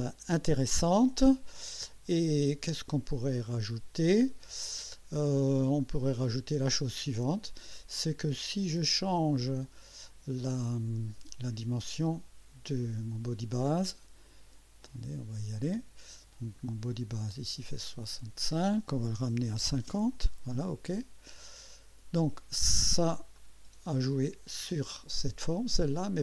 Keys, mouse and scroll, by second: 1.0-5.0 drag, 6.1 click, 7.8 scroll down 1, 8.3-9.4 drag, 9.6 click, 14.8 click, 16.6 scroll up 1, 17.7 click, 19.2-20.1 typing, 21.3 click, 23.4-24.4 drag.